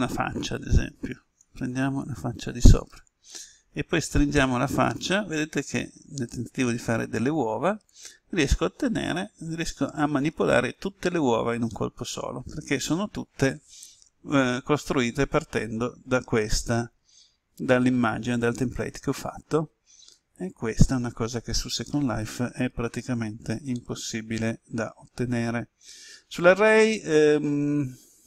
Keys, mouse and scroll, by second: 1.4 click, 2.7 right click, 3.9 s, 7.9 click, 8.5-28.2 middle drag.